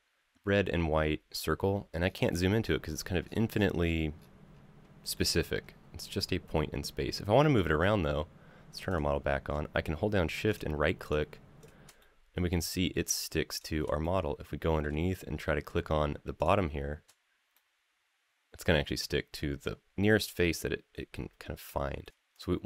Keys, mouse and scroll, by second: 1.8 scroll up 2, 2.4-3.7 scroll down 10, 4.0-4.6 scroll up 3, 4.9 shift+middle click, 5.5-5.9 scroll down 2, 5.9-6.7 scroll up 1, 7.2 middle click, 7.6 scroll down 2, 8.7 click, 10.3 shift+right click, 10.8 shift+right drag, 11.4 shift+right drag, 11.8-12.7 middle drag, 13.3 shift+right drag, 13.8-14.6 middle drag, 16.2 shift+right click, 17.3-18.6 middle drag, 18.9 scroll up 3, 19.4-19.9 middle drag, 20.9-21.3 shift+middle drag, 21.8 middle drag, 22.1 right click, 22.1 scroll down 3, 22.1 drag.